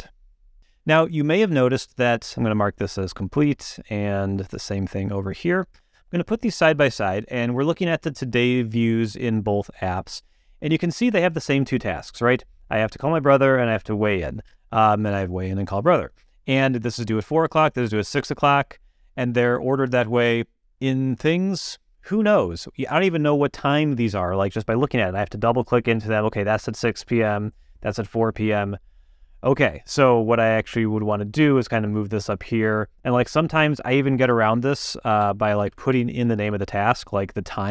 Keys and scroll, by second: 34.2-36.1 typing, 36.7 Return.